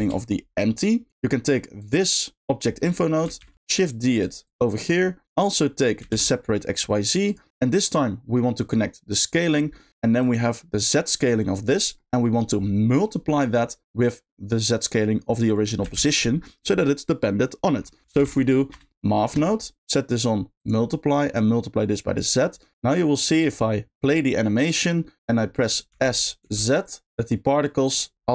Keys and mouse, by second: 1.1-2.8 right drag, 2.8 middle click, 4.2 shift+click, 4.5-5.3 shift+drag, 7.0 shift+click, 7.3 shift+click, 7.8 middle click, 8.7-9.4 drag, 10.3 click, 10.8 click, 11.0 click, 11.9 middle click, 12.3 middle click, 13.3 middle click, 15.9 shift+a, 19.8 click, 21.4 click, 21.5 click, 23.4 click, 25.9 s, 27.9 click.